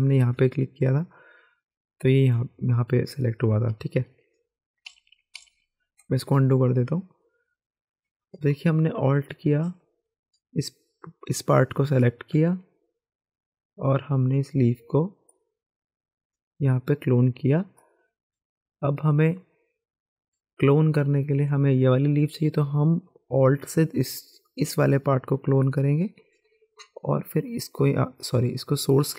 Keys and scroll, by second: 4.9 ctrl+z, 5.3 ctrl+z, 29.0 ctrl+z.